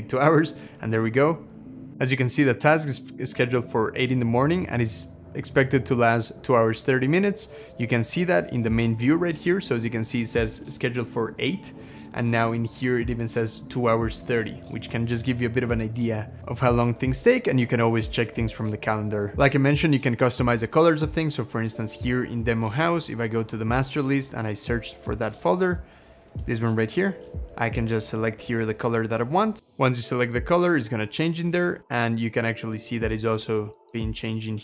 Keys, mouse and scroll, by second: 31.7 Escape, 32.6 scroll down 1.